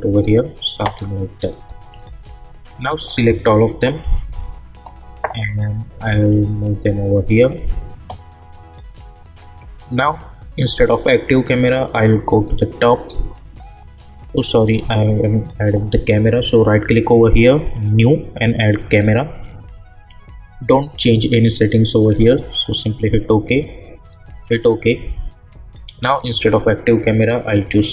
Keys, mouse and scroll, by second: 1.9 u, 3.0 click, 4.1 shift+click, 6.3-7.5 shift+drag, 15.6 right click, 17.8 click, 22.5 click.